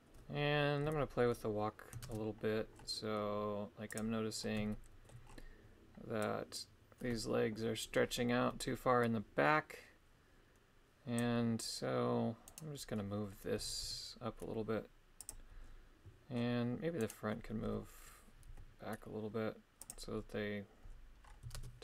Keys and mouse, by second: 0.8 KP_3, 2.0 shift+space, 4.0 click, 4.7 shift+middle click, 6.2-11.2 drag, 12.5 right click, 13.6 g, 13.8 y, 15.2 click, 17.0 right click, 17.6 g, 18.5 y, 19.8 click, 21.6 shift+space.